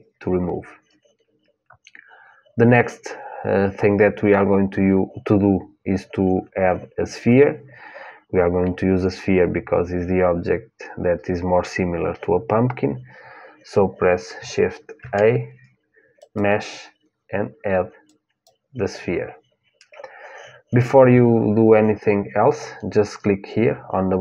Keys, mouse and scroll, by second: 14.7 shift+a.